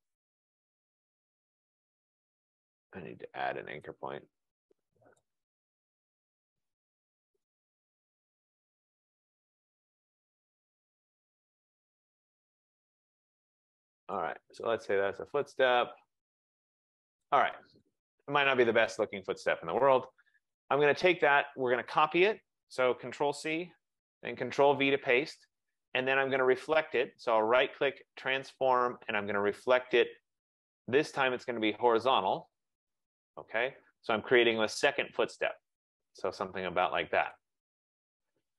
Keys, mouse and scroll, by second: 5.3 click, 7.5 click, 9.1 click, 14.2 click, 17.2 click, 17.8 click, 18.8 F15, 19.7 click, 21.4 click, 23.8 ctrl+c, 24.4 ctrl+v, 26.5 click, 27.0 right click, 30.1 click, 32.1 click, 33.4 click, 37.4 click.